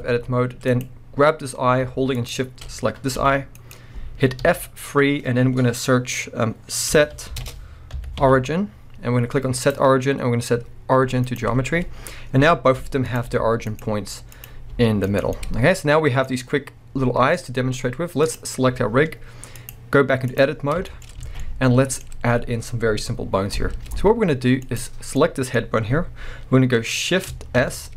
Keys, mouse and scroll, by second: 0.0 scroll up 1, 0.7 click, 2.1 shift+click, 2.7-3.2 scroll down 1, 3.2 g, 3.7 right click, 4.4 F3, 13.1 click, 13.3 g, 13.8 right click, 14.4 click, 14.7 g, 15.2 right click, 15.3-18.2 middle drag, 15.3 scroll down 2, 16.2 scroll up 1, 17.2-18.2 scroll down 2, 18.2 click, 18.7-19.5 scroll down 1, 19.5-20.9 drag, 20.6 scroll down 1, 20.9-24.6 shift+middle drag, 21.3 alt+a, 22.1-24.6 scroll up 1, 24.6 click, 25.2-27.9 middle drag, 27.6 shift+s.